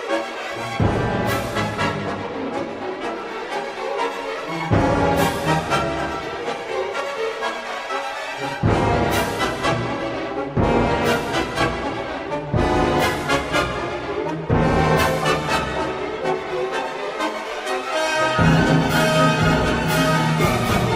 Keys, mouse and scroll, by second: 0.9 k, 7.5 shift+middle click, 9.7 click, 11.7 x, 13.9-16.0 drag, 17.3 click, 18.4 Tab, 19.8-20.8 drag.